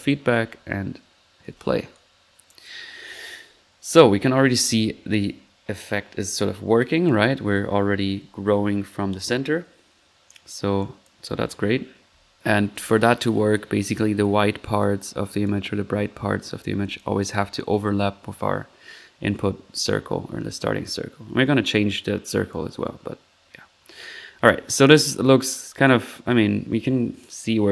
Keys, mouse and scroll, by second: 1.4-2.3 typing, 1.4-1.9 middle drag, 1.9-2.3 drag, 2.4 click, 4.2 typing, 6.3 drag, 6.5 typing, 7.0 click, 8.9-9.7 typing, 9.1 click, 10.8-11.2 drag, 11.1 typing, 12.4-12.9 middle drag, 14.8 click, 15.3-15.7 typing, 15.5-15.9 drag, 16.4-16.8 middle drag, 16.8-17.4 drag, 19.7 middle click, 20.4 middle click, 22.2 click, 24.6-26.5 drag.